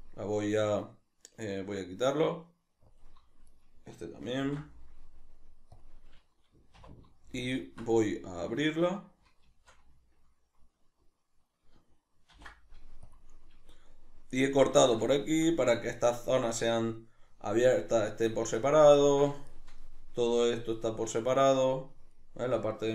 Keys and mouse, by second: 3.4 right click, 4.4 ctrl+e, 6.7 2, 7.5 alt+right click, 8.0-9.9 middle drag, 12.3 ctrl+e, 13.7 middle click, 15.0-19.7 ctrl+shift+middle drag, 19.8-22.9 middle drag.